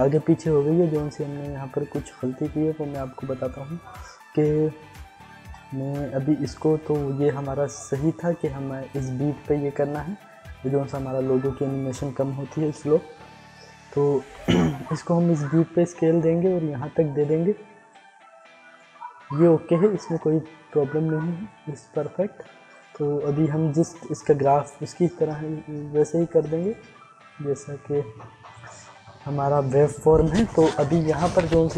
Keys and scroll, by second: 12.5 alt+[, 14.1 ctrl+z.